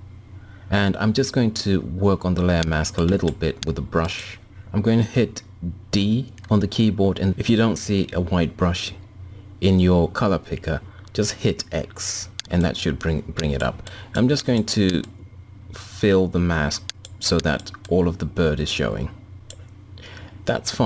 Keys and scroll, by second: 5.6 d.